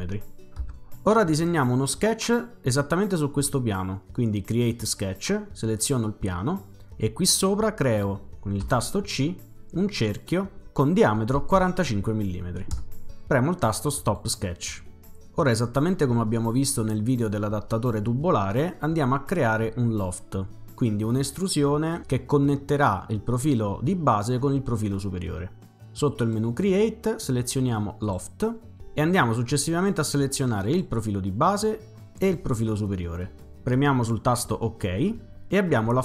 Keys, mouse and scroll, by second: 0.6 Return, 1.6-1.9 typing, 4.5 click, 5.8 click, 8.6 c, 10.2 click, 11.2-12.1 typing, 12.7 Return, 14.0 click, 26.1 click, 28.0 click, 30.7 click, 32.2 click, 34.5 click.